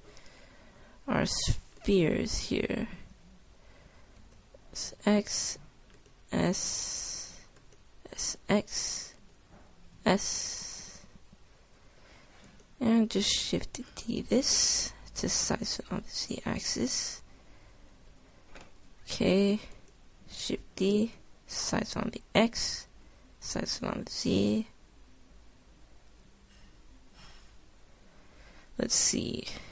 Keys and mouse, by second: 0.0 F11, 2.5-4.6 drag, 4.6 s, 5.8 s, 6.9 s, 8.7 s, 9.6 click, 10.2 s, 14.1 shift+d, 14.6 click, 15.7 s, 17.3 s, 21.3 click, 21.3 shift+d, 21.7 click, 22.4 s, 24.0 s.